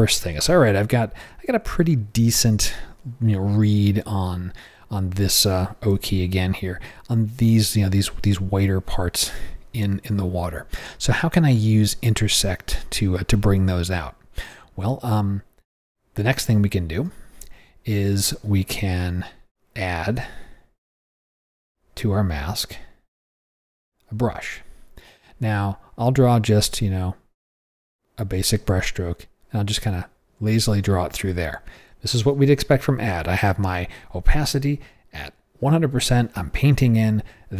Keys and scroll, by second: 5.9 o, 16.9 o.